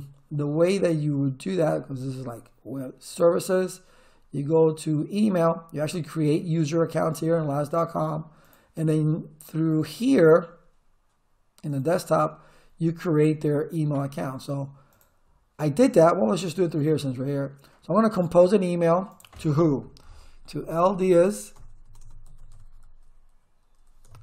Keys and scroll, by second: 20.4-23.2 typing.